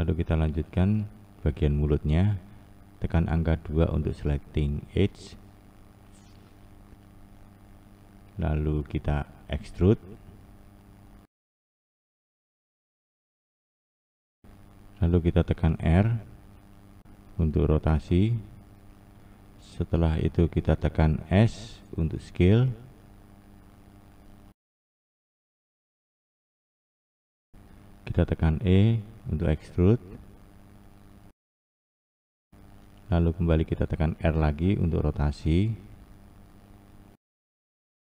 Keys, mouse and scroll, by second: 3.4 2, 5.1 click, 10.1 e, 15.3-17.3 scroll down 2, 17.3 r, 21.4 s, 25.0 click, 29.1 e, 33.8 r.